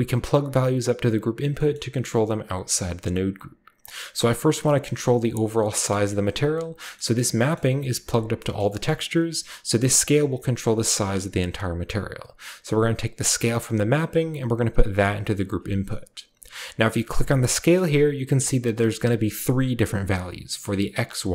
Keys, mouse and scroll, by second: 1.7-3.4 middle drag, 3.4 scroll up 1, 4.3 click, 6.0 scroll up 1, 6.0-6.8 middle drag, 6.4 drag, 6.8-7.3 scroll up 1, 7.5-8.3 scroll up 1, 7.5 click, 7.5 middle click, 8.5 middle click, 8.6 scroll up 1, 8.8-11.5 middle drag, 11.5-14.9 drag, 17.0 click.